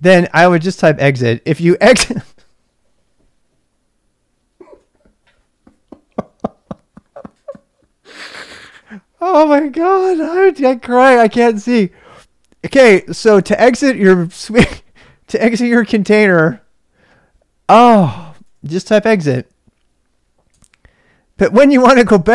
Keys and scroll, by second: 0.8-2.4 typing, 17.7-19.6 typing, 20.5 Return.